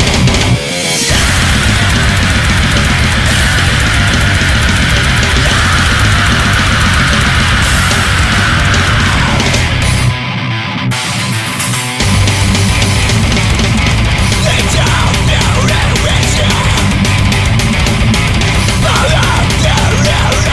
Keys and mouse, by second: 12.5 ctrl+z, 14.2 right click.